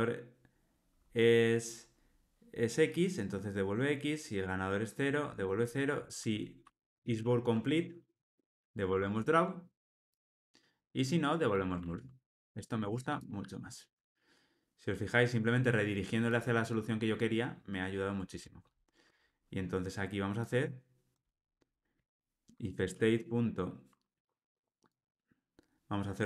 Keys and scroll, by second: 8.9 Tab, 12.2 alt+super+l.